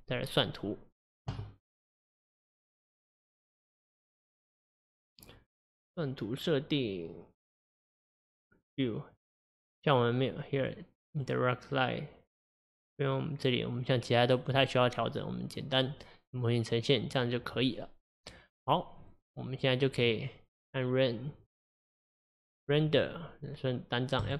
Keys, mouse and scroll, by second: 6.3-9.1 scroll down 2, 9.1-14.1 drag, 22.9-24.3 drag.